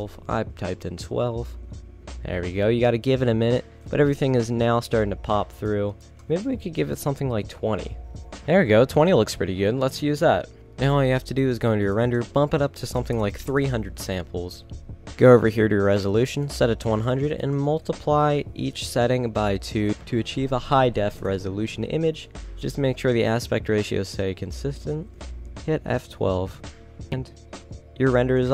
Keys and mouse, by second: 10.6 shift+z, 11.2-12.4 middle drag, 13.7 KP_0, 14.4-16.6 middle drag, 16.6-19.4 drag, 19.9 click, 22.3-24.1 drag.